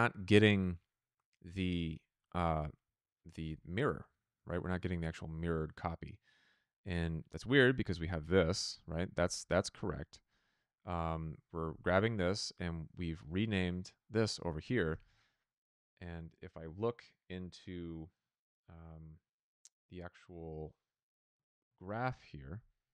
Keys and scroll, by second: 14.9 f.